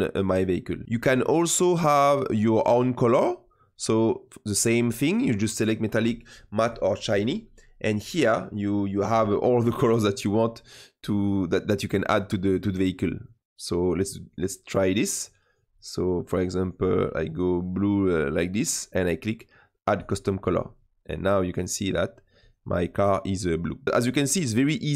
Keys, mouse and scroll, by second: 7.9 click, 13.0 click, 14.1 click, 19.9-22.4 drag, 22.7-23.8 middle drag, 24.1-24.6 scroll down 1, 24.6-24.9 middle drag.